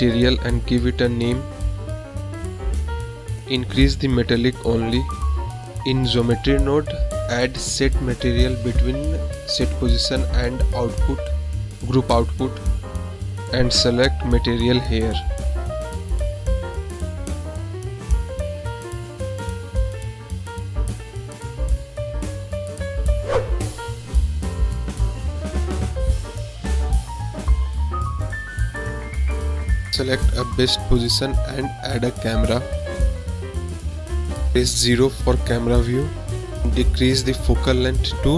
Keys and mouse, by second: 1.5-3.1 drag, 5.0 click, 6.2 click, 7.3 click, 7.7-8.5 middle drag, 9.9 click, 10.7 click, 11.2 click, 12.0 click, 12.6 shift+a, 16.7-17.8 drag, 18.3 click, 19.0-20.1 drag, 20.8-21.3 drag, 22.1 click, 22.5-22.9 middle drag, 24.3-26.3 drag, 27.7 click, 30.0 click, 31.2 shift+a, 34.2 KP_0, 36.5-37.6 drag.